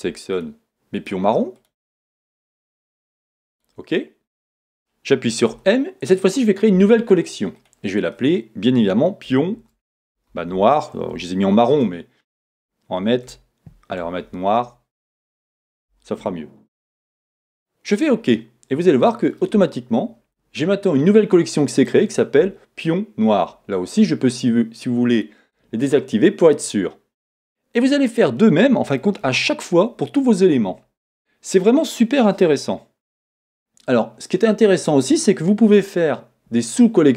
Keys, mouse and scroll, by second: 25.1 click, 25.9 middle click, 28.8-31.2 scroll down 2.